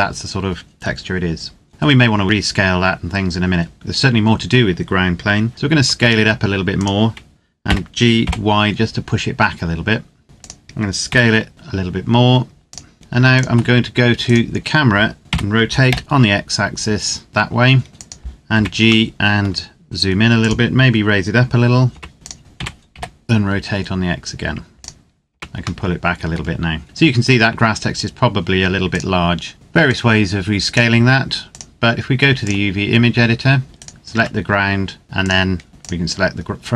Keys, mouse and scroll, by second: 3.7 KP_0, 5.6 s, 6.5 click, 7.4 g, 8.0 y, 10.2 click, 10.5 scroll up 1, 10.8 s, 12.4 click, 14.1 right click, 15.2 r, 17.9 click, 18.3 g, 18.8 middle click, 20.1 click, 21.7 g, 22.1 click, 22.4 r, 22.7 x, 24.5 click, 25.1 g, 25.6 middle click, 28.7 click, 33.6 right click, 33.9 Tab, 35.0 click, 36.2-36.7 scroll down 1.